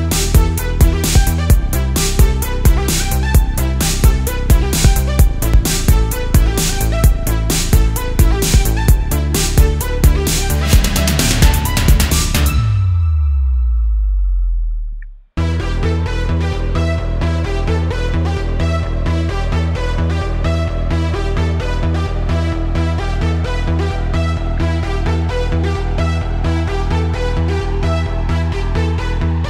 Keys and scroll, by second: 0.2 super+z, 1.1-3.4 typing, 3.9 super+z, 4.5 super+z, 7.8 super+z, 8.0 space, 8.8 super+z, 10.3 space, 14.9 space, 15.6 space, 17.3 space, 18.4 super+z, 18.6 space, 19.4 super+space, 20.3 super+z, 20.9 super+z, 21.5 super+z, 22.7 space, 24.5 space, 25.1 space, 29.1 space.